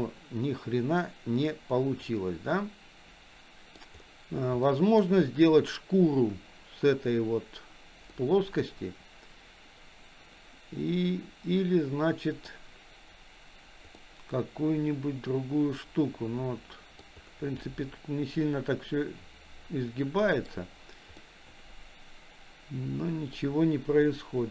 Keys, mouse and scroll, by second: 0.0 click, 1.5-3.8 middle drag, 4.7-5.0 middle drag, 8.1-12.5 middle drag, 14.0-17.0 middle drag, 17.7-20.5 middle drag, 21.2-23.4 middle drag.